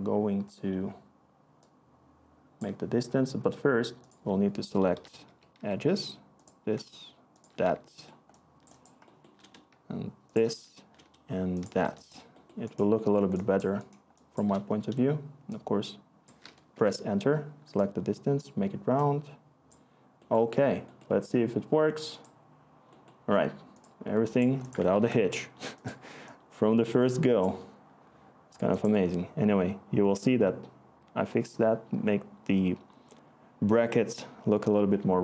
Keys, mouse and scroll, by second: 5.3-5.6 typing, 12.9-15.7 scroll, 15.7-16.7 scroll, 16.7 Return, 24.9 ctrl+s.